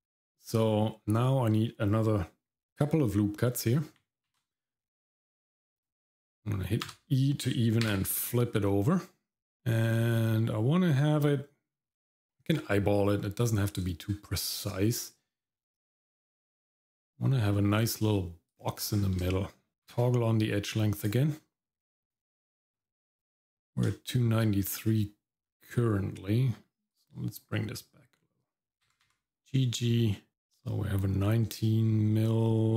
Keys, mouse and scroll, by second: 4.3 ctrl+r, 18.9-19.2 scroll down 2, 19.3 shift+middle click, 19.9 q, 22.0 click, 22.7 scroll up 2, 23.9 shift+middle click, 25.5 middle click, 26.9 alt+click, 28.8 g.